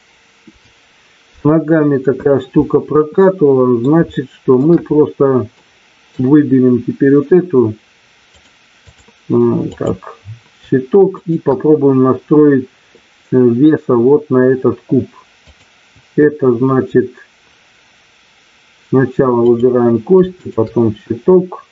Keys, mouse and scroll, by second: 3.2 middle click, 4.1 shift+middle click, 5.6 middle click, 8.3 click, 9.7 click, 11.2 shift+click, 15.4-17.4 drag.